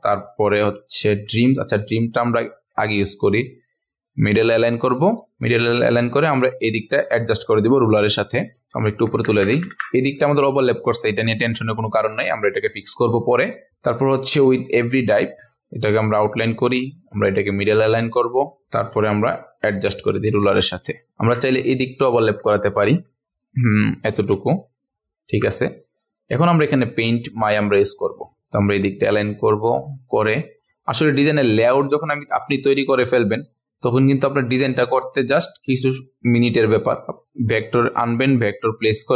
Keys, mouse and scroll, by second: 0.2 scroll down 1, 0.3-0.6 scroll up 1, 1.0-1.4 ctrl+alt+scroll down 1, 1.4 click, 2.3 right click, 3.1 click, 8.9 Up, 9.1 Up, 9.3 Up, 9.5 Up, 9.7 Up, 10.5 ctrl+alt+scroll up 1, 11.6 ctrl+alt+scroll down 1, 12.3 ctrl+alt+scroll up 1, 12.9-13.5 ctrl+alt+scroll up 1, 13.5 click, 15.3 right click, 16.4-21.1 drag, 21.1-21.5 ctrl+alt+scroll up 1, 21.5 click, 22.2 Up, 22.4 Up, 22.7 Up, 22.9 Up, 23.2 Up, 23.7 click, 25.8 click, 26.9 right click, 27.9 click, 28.3 ctrl+alt+scroll up 1, 28.4 click, 35.4-39.1 shift+drag.